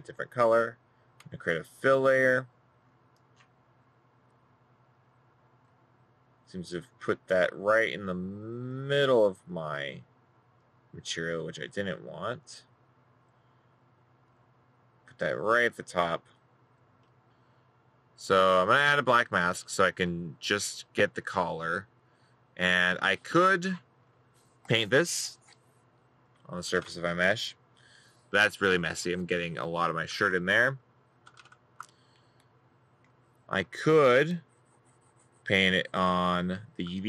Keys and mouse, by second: 33.6 middle click, 34.1 middle click, 35.2 right click.